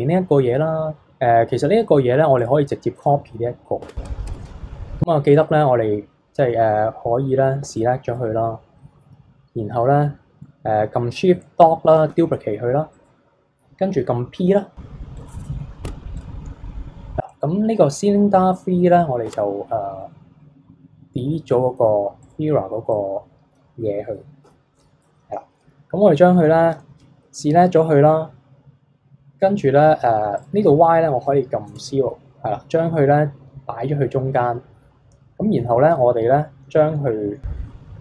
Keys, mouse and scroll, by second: 2.4 click, 3.0-3.8 middle drag, 3.8 Tab, 4.3 KP_3, 5.3-7.6 drag, 7.6 b, 12.1 shift+d, 15.2 p, 15.5-15.9 middle drag, 15.9 Tab, 16.2 click, 19.2 Tab, 22.2 click, 22.9-24.4 middle drag, 24.4 KP_7, 26.7 a, 30.4-32.4 drag, 32.4-35.5 scroll down 1, 35.9 r.